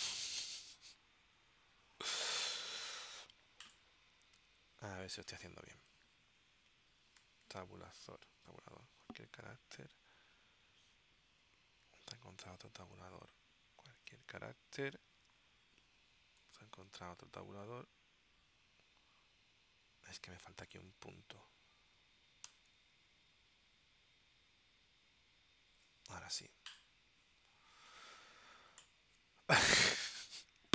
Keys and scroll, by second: 5.9 Left, 7.3 Right, 11.6 Right, 16.6 Right, 20.0 Right, 22.6 •.